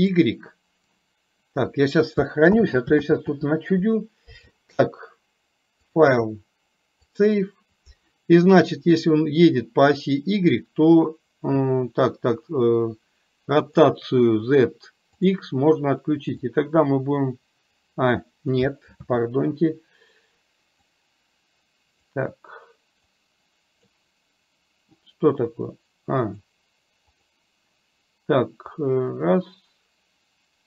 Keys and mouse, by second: 2.6 ctrl+z, 3.2 ctrl+z, 6.1-7.5 drag, 13.7 click, 16.6-18.1 drag, 19.1 ctrl+z, 20.8-22.1 drag, 23.3 click, 28.7-30.6 drag.